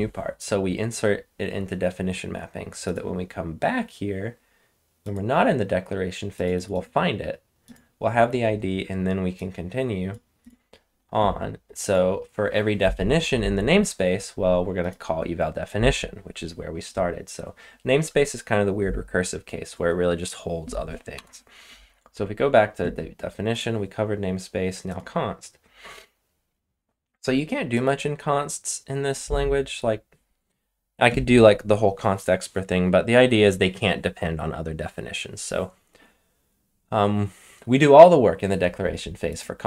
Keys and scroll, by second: 21.1 Return.